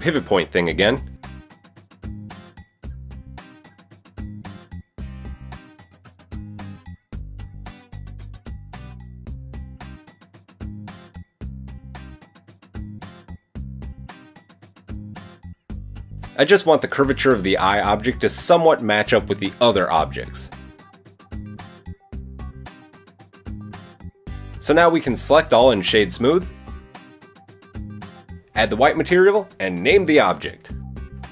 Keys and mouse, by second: 1.1 KP_1, 2.1-6.8 drag, 4.5 Tab, 6.8 middle click, 7.3 a, 7.8 KP_1, 9.5 click, 9.9 shift+click, 10.1 shift+click, 11.7 click, 12.0-14.0 middle drag, 14.0-22.3 drag, 16.1 s, 19.2 Tab, 19.8 Tab, 22.5-25.6 middle drag, 23.5 Tab, 24.5 Tab, 24.8 a, 25.6-28.1 drag, 26.3 Tab, 27.1 KP_1, 28.1 middle click, 28.4 click, 28.6 middle click, 29.4-31.3 drag.